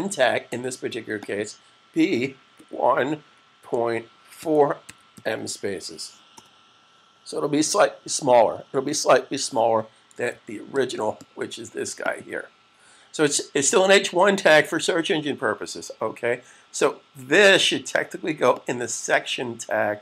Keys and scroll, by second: 2.2-5.5 typing, 10.2 super+s.